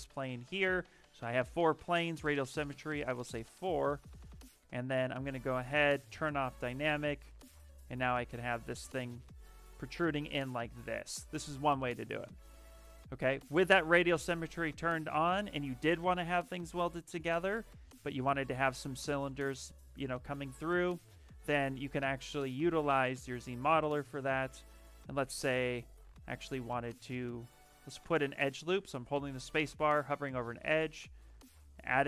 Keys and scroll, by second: 4.5 shift+d, 7.5 w, 10.0 q, 12.0 ctrl+z, 12.1 ctrl+z, 13.2 s, 17.7 shift+f, 20.7 s, 22.7-24.2 typing, 26.8 space.